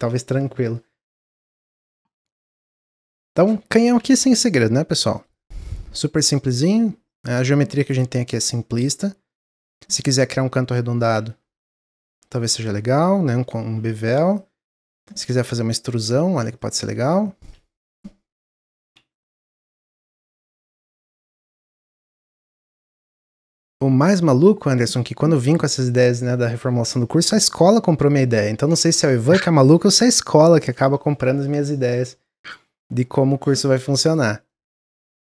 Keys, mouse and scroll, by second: 1.3 middle click, 2.0 scroll up 3, 2.3-3.7 middle drag, 3.7 shift+d, 5.3-6.8 middle drag, 6.8 click, 7.4-9.3 middle drag, 9.3 click, 9.5-14.9 middle drag, 17.3 click, 22.0-22.9 middle drag, 22.9-23.4 scroll down 1, 32.6-33.0 middle drag, 33.0-33.4 scroll down 3, 33.4-34.1 middle drag, 34.1 click, 34.4-35.2 middle drag.